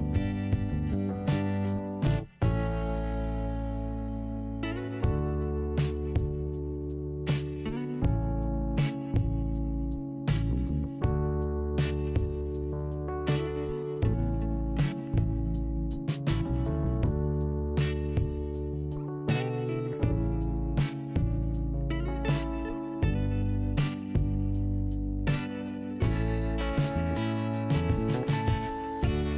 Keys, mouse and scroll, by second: 0.6 click, 1.2 click, 2.9 click, 4.5 click, 4.7 click, 5.5 click, 6.6 click, 8.5 click, 12.3 click, 14.2 click, 18.5 click, 19.5 scroll down 1, 20.8 p, 21.9 click, 26.0 click, 26.0 click, 28.1 click.